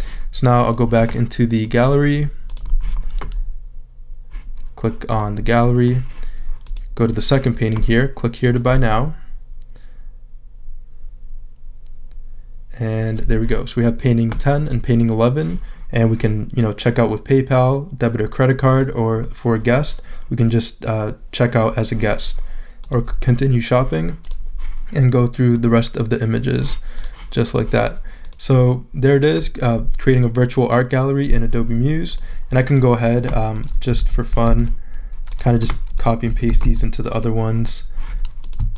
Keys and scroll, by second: 34.0 super+a, 34.5 super+c, 36.3 super+a, 36.6 super+v.